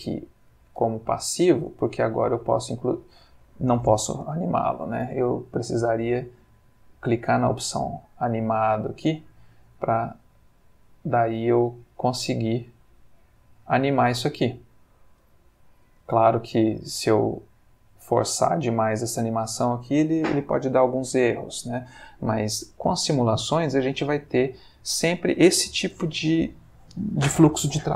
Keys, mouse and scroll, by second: 1.0-1.9 ctrl+middle drag, 2.2 g, 3.3 Escape, 6.8 click, 9.9 g, 16.0 Escape, 17.7 middle click, 18.4-19.2 shift+middle drag, 21.1 Escape, 23.7 click, 24.8 middle click.